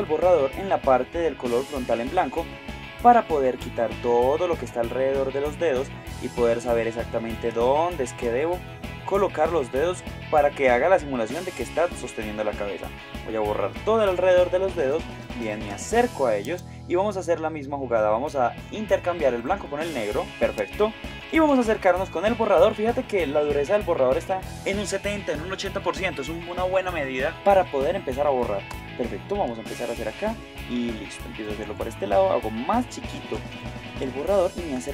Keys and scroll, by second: 1.9 Tab, 7.6 space, 14.2 space, 16.4 Tab, 20.7 Tab, 21.1 space, 34.3 super+space.